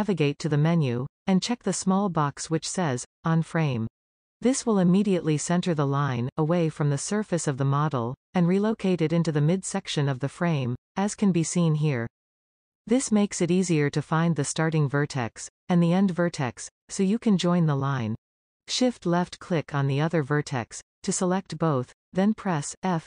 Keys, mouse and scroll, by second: 4.8 click, 7.5-10.5 middle drag, 19.3-19.7 shift+drag.